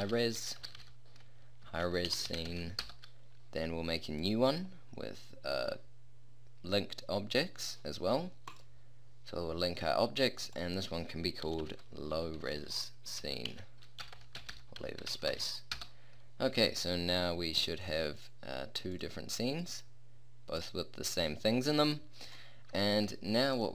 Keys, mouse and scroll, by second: 0.3-4.2 middle drag, 2.5 e, 4.2-6.1 drag, 6.1-10.5 middle drag, 10.5-12.5 drag, 12.5-14.1 middle drag, 14.1 BackSpace, 21.3 click, 22.3 middle click, 22.9 a.